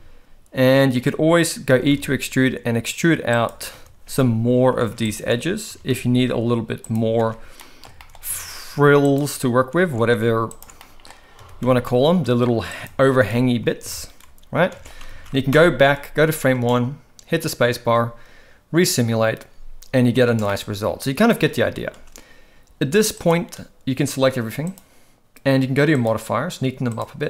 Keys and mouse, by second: 1.7 e, 3.7 shift+r, 4.5 alt+a, 5.1 alt+shift+click, 5.7 e, 7.1 shift+r, 7.5 middle click, 7.9 shift+middle click, 8.3 alt+a, 9.0 alt+shift+click, 9.9 alt+a, 10.7 middle click, 11.3 e, 13.1 shift+r, 14.2 Tab, 14.8 alt+a, 15.1 ctrl+j, 15.5 shift+Left, 16.5 space, 20.4-21.2 middle drag, 20.4 space, 21.5 space, 21.8 space, 23.1 click, 26.0 click, 26.8 click.